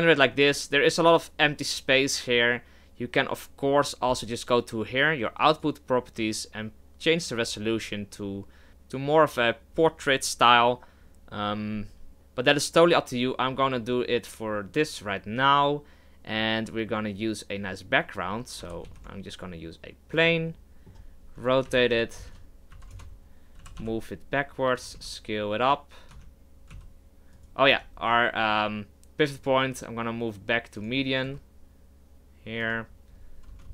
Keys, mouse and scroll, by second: 7.5-9.8 drag, 18.6 shift+c, 18.8 shift+a, 20.5-21.7 middle drag, 21.7 r, 23.6 g, 24.9 s, 26.1 Tab, 26.7 s, 27.7 Tab, 30.8 click, 31.2 s, 33.6 KP_0.